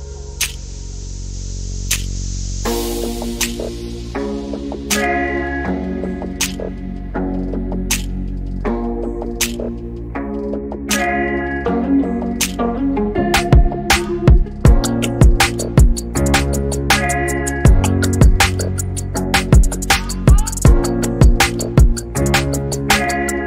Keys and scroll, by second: 2.6 e, 3.9 l, 8.4 e, 9.7 m, 13.6-14.4 typing, 17.4-18.1 typing, 21.1 |.